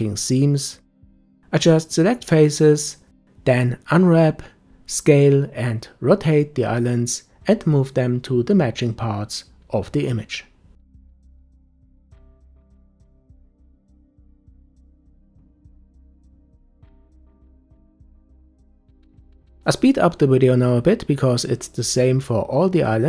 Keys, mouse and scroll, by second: 0.7 Tab, 4.4 Tab, 8.0 g, 10.0 Tab, 11.8 Tab, 13.2 s, 13.9 Tab, 16.1 Tab, 17.1 middle click, 18.1 Tab, 18.5 Tab, 18.9-20.1 drag, 20.2-21.6 shift+drag, 22.6 u.